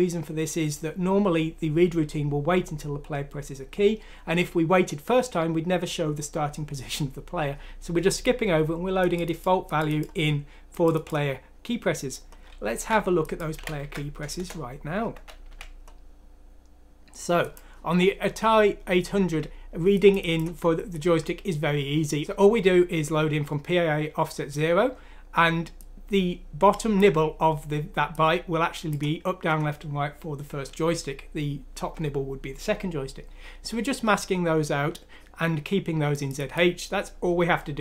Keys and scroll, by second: 12.7 ctrl+c, 13.5 ctrl+f, 13.8 ctrl+v, 14.3 Return, 15.0 Escape, 15.4 F3.